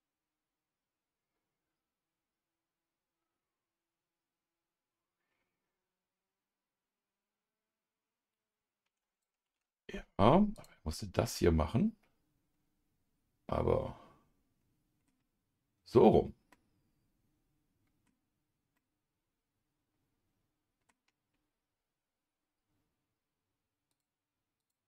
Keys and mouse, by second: 10.5 click, 11.2-15.1 middle drag, 16.5-18.1 middle drag, 18.7-20.9 middle drag, 23.9 click, 24.6 click.